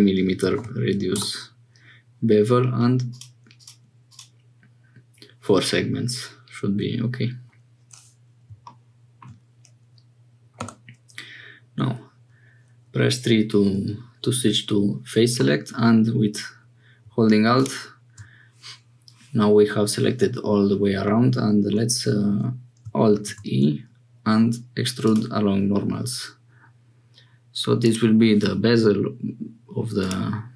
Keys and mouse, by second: 0.5 m, 4.0 click, 9.0 shift+middle click, 10.5 3, 15.4 middle click, 21.0 middle click, 23.1 alt+e, 30.0-30.5 drag.